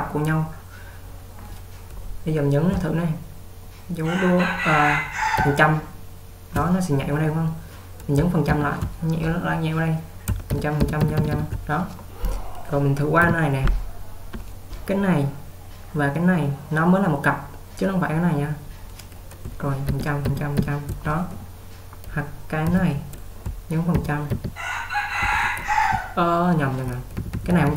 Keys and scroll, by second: 5.5 typing, 10.6-11.1 typing, 13.0-13.8 typing, 20.0-20.6 typing, 22.7 typing, 24.4 typing, 26.0-27.7 typing.